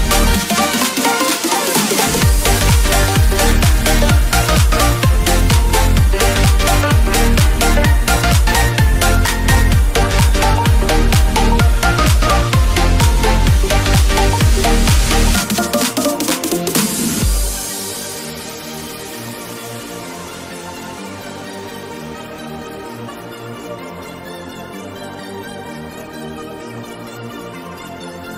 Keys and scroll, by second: 1.8 Return, 12.7 [, 16.8 ], 23.6 ].